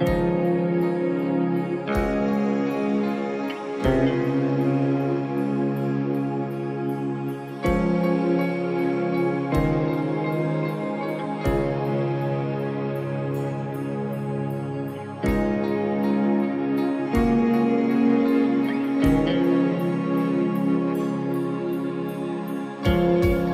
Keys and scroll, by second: 3.2 ctrl+-, 4.7 ctrl++, 22.8 ctrl+-.